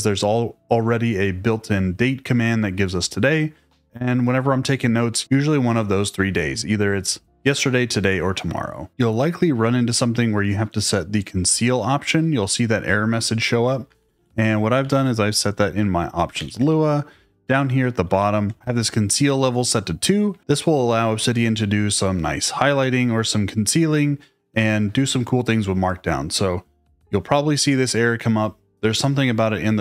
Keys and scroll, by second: 13.7-16.3 typing, 15.6 Return, 18.1 shift+v, 20.2 Escape.